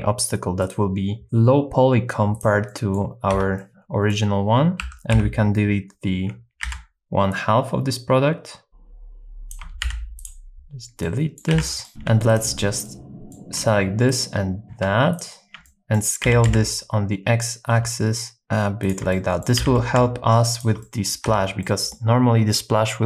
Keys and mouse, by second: 0.7 right click, 1.2 click, 2.7 middle click, 3.3 Tab, 3.6 middle click, 4.8 1, 5.1 KP_7, 6.7 alt+z, 7.4-8.7 drag, 8.7-10.3 shift+drag, 9.8 x, 11.0 middle click, 11.6 alt+z, 11.8 middle click, 11.9 Tab, 11.9 2, 12.8 middle click, 14.1 alt+shift+click, 14.6 super+z, 15.1 alt+shift+click, 15.6 middle click, 16.3 s, 16.5 x, 19.1 middle click, 19.6 s, 19.8 x, 20.5 shift+click, 20.9 middle click, 21.2 Tab, 21.6 middle click.